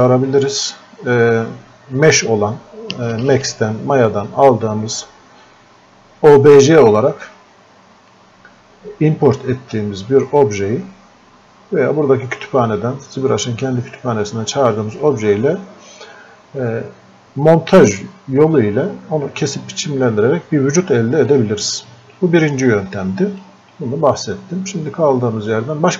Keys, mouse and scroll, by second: 7.3-21.3 drag, 21.3-25.9 drag.